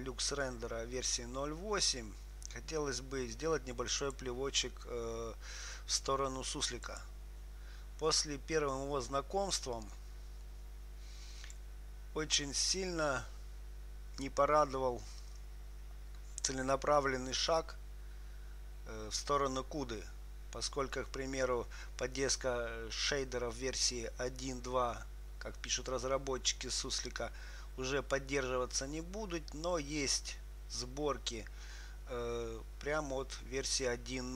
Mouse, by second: 4.3-7.3 drag, 10.0-11.8 drag.